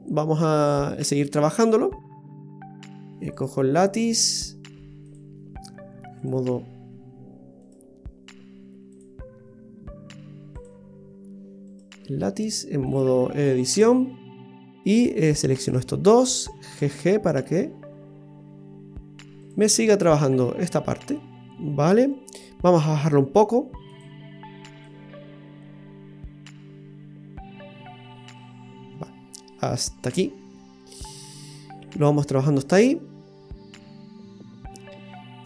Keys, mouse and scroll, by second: 3.3 right click, 5.0 click, 7.6 right click, 8.9 click, 11.7 right click, 12.8 click, 14.6 right click, 15.4 shift+right click, 16.7 g, 20.0 middle click, 23.9 click, 24.8 click, 30.3-30.6 scroll down 2, 30.5 middle click.